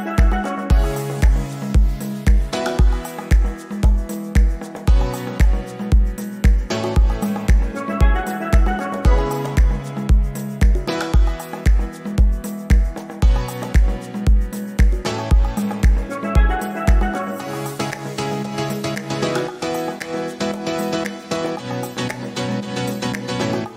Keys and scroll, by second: 3.6 shift+F2.